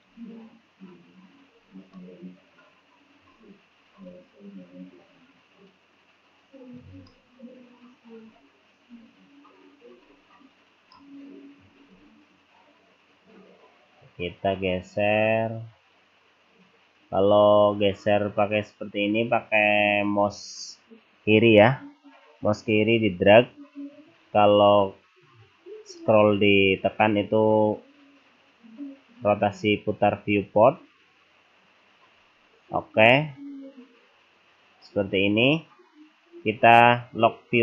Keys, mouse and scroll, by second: 0.8-1.5 scroll up 1, 1.5-2.0 scroll down 1, 2.0 middle click, 4.1 click, 7.1 middle click, 8.9 scroll down 1, 10.8 middle click, 12.0 click, 26.0 middle click, 33.1-33.6 scroll up 1, 33.6 scroll down 1, 33.8-34.2 scroll down 1.